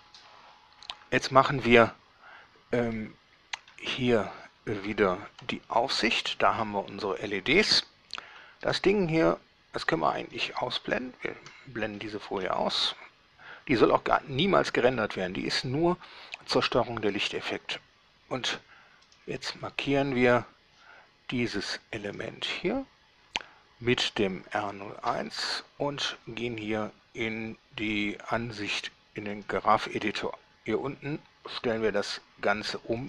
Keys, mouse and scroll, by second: 3.1-4.1 drag, 5.5 7, 8.8 alt+a, 10.0 Escape, 11.0 shift+2, 12.2-12.8 shift+middle drag, 12.9-13.4 shift+scroll up 3, 14.1-15.4 middle drag, 19.3 right click, 22.3 click, 28.1 click, 29.5 click.